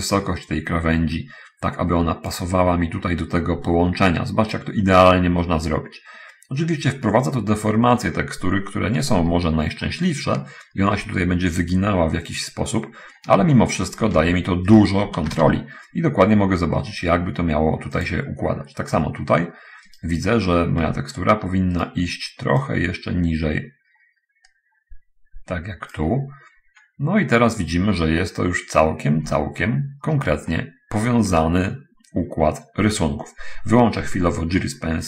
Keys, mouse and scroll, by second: 4.8-7.8 drag, 8.0-8.6 scroll down 1, 8.8-9.2 scroll down 1, 10.2-11.4 shift+drag, 13.0-13.4 scroll down 1, 13.8 shift+click, 15.1 shift+right click, 15.3 shift+d, 15.5 x, 18.4 click, 18.6-19.2 scroll up 1, 19.3-19.6 scroll up 1, 19.8 right click, 21.2 Tab, 22.1 right click, 22.8-26.5 drag, 26.6-27.2 scroll down 1, 27.3-27.8 scroll down 1, 28.0 scroll down 1, 29.5 Tab, 30.0 scroll down 1, 30.8-31.8 shift+middle drag.